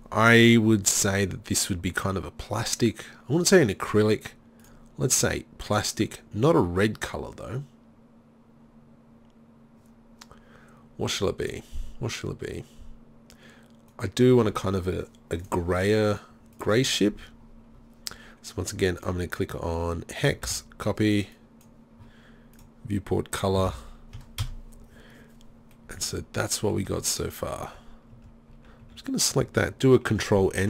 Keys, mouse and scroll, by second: 11.5-15.4 drag, 19.0-20.7 drag, 20.7-22.6 middle drag, 22.6-25.9 drag, 26.9 Tab, 27.7 Tab, 28.2 Tab, 28.5 a, 28.9 a, 30.5 ctrl+n.